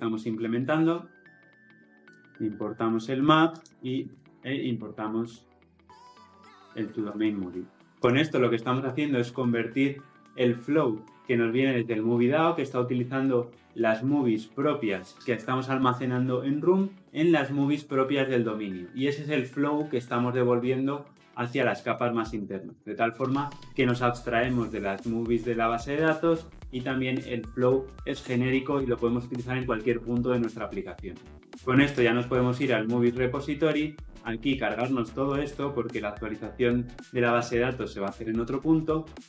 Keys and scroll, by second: 2.0 alt+Return, 7.9 ctrl+alt+o.